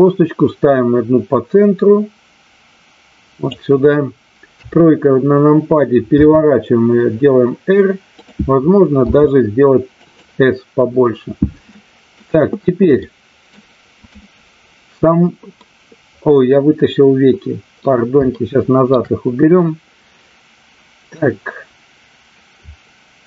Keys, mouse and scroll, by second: 4.4 KP_3, 6.2 r, 8.1 click, 10.0 click, 11.7 middle click, 13.1 middle click, 14.0 click, 15.6-17.2 middle drag, 17.7 middle click, 18.3 shift+middle click.